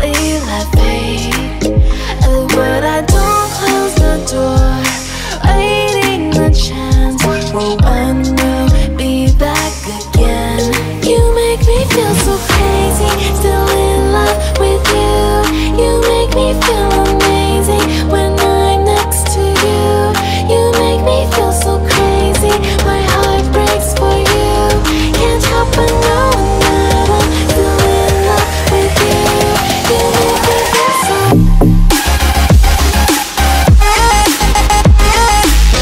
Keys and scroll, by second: 16.3-17.1 typing, 26.8-27.8 typing, 35.6 shift+d.